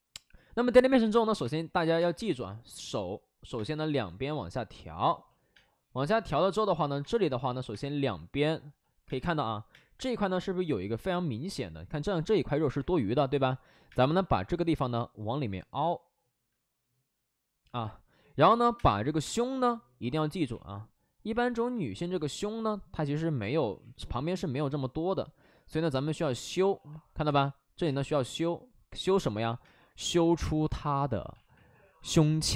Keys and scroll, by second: 1.3-2.1 typing, 3.5 space, 5.5 space, 5.8 2, 6.9 space, 7.3 2, 7.6 space, 7.9 1, 9.0 space, 9.6 space, 12.2 alt+s, 12.7 2, 13.8 space, 18.6 5, 18.6 space, 19.1 space, 20.3 ctrl+z, 20.4 ctrl+z, 23.7 ctrl+z, 27.8 2, 27.8 space, 29.5 space, 30.3 space, 31.3 alt+s, 31.9 alt+s, 32.1 space.